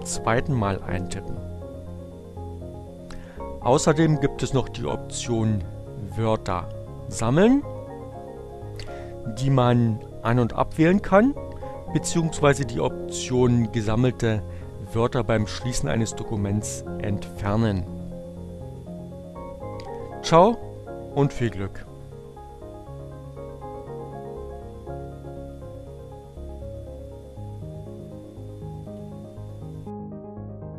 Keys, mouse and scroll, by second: 27.0 click.